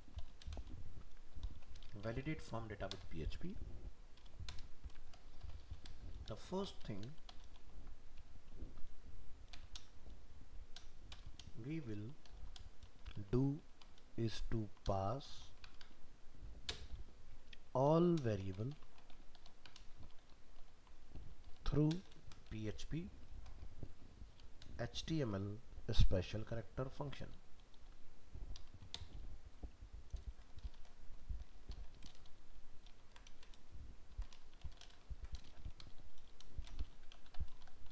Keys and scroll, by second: 32.3 ctrl+shift+Left, 32.9 ctrl+shift+Right, 34.1 ctrl+x, 35.1 ctrl+v.